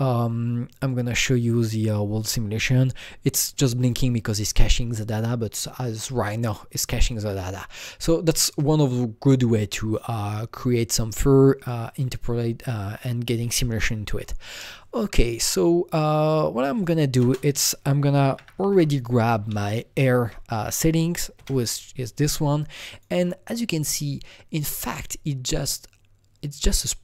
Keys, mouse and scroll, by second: 0.9 click, 8.3 click, 8.3 click, 16.7 click, 16.8 click, 17.2 ctrl+space, 18.3-19.5 typing, 20.2 Down, 20.5 Up, 21.3 Return, 22.9 click, 26.6 Return, 26.6 click.